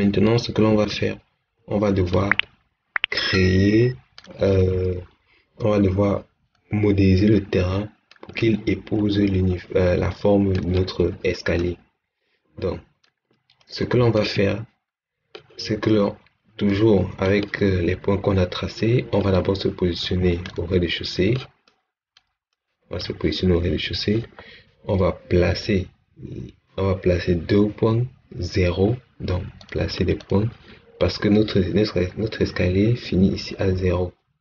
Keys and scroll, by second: 14.2 Escape.